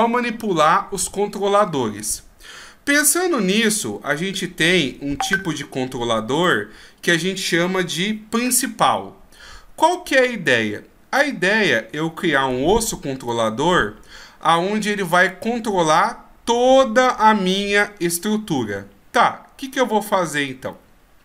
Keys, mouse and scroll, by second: 4.8 alt+f, 5.3 alt+g, 6.4 middle click, 9.4-9.7 scroll down 3, 9.9 right click, 10.4 middle click, 13.2 middle click, 17.2-20.2 scroll up 1.